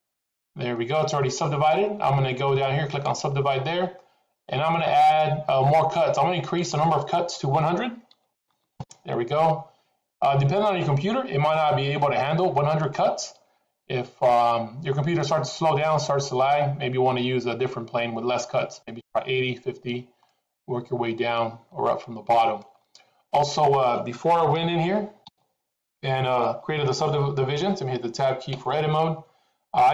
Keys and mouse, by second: 6.6-10.8 drag, 8.5 KP_0, 15.6 middle click, 20.2-22.6 middle drag, 24.7 ctrl+z, 25.1 ctrl+z, 28.5 Tab.